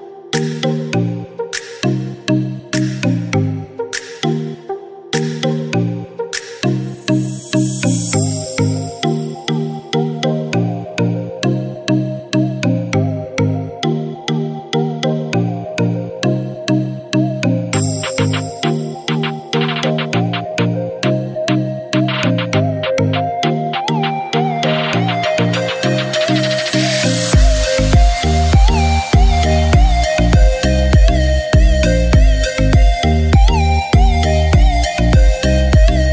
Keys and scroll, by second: 13.5 ctrl+shift+a, 34.0 ctrl+-.